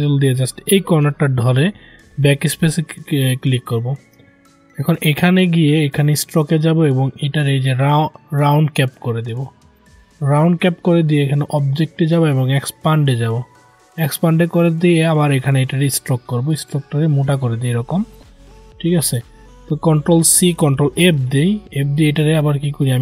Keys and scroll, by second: 20.4 ctrl+c, 20.8 ctrl+f.